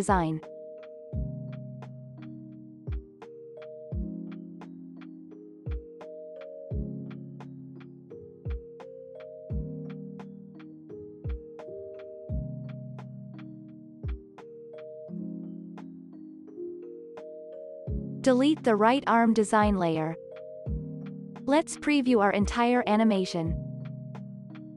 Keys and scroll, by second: 1.5 ctrl+s, 16.3 Return, 16.9 BackSpace, 18.8 shift+r, 19.7 Delete, 20.4 ctrl+s, 21.1 ctrl+a.